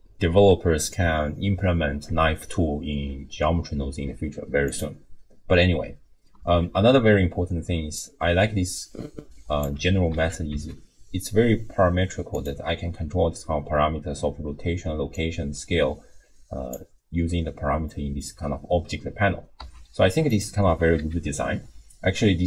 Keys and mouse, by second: 4.7 click, 6.4 alt+r, 8.1-9.6 drag, 10.1 alt+r, 15.2-16.8 drag, 17.9-18.2 middle drag, 19.6 r, 20.6 r.